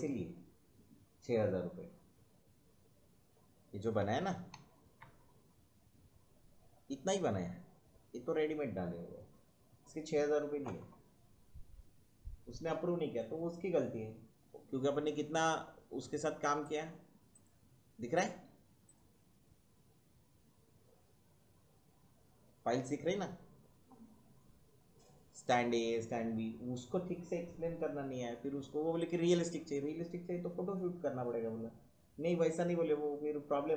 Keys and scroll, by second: 3.9 Left, 5.8 Right, 15.1 Right.